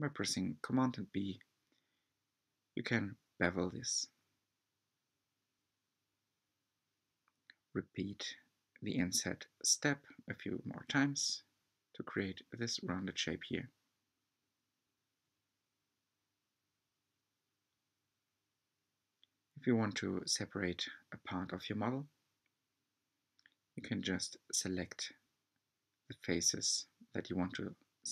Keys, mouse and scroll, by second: 0.0 g, 7.0 g, 9.6-9.9 scroll down 2, 9.9 Tab, 10.4-12.7 middle drag, 12.7-13.4 scroll up 3, 13.4 shift+middle click, 14.3-15.2 scroll up 2, 15.2-18.0 shift+middle drag, 18.0 3, 19.2 alt+click, 19.9 alt+shift+click, 21.6 alt+shift+click, 22.2 alt+shift+click, 22.6 middle click, 23.5-23.8 scroll down 2, 23.8 shift+middle click, 24.7-25.7 scroll up 2, 25.7-26.1 scroll up 1, 26.1 alt+shift+click, 26.6 alt+shift+click, 27.3 shift+click.